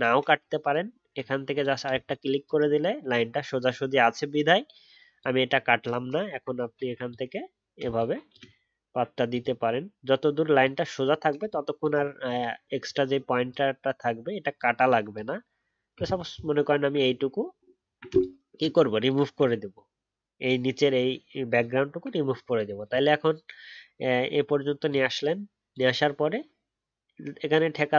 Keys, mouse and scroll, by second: 16.1-17.7 alt+scroll down 1, 21.5-22.4 alt+scroll down 1, 22.4-24.4 alt+scroll up 1.